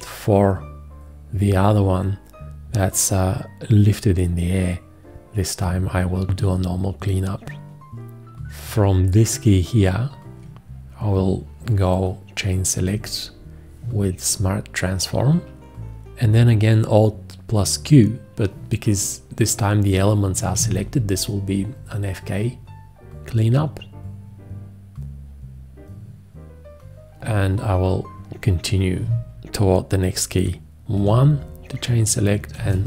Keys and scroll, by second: 12.8 1, 20.6 alt+q, 31.0 1, 32.5 alt+q.